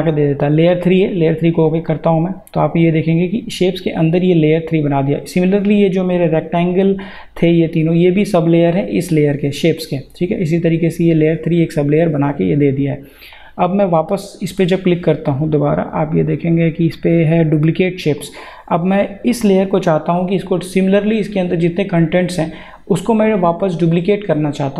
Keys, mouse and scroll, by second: 13.3 click, 18.2 click.